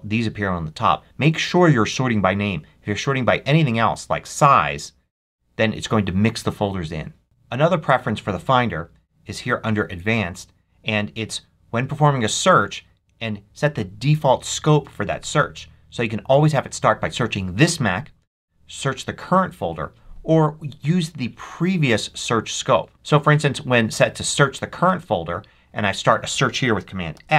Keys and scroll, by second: 27.0 super+f.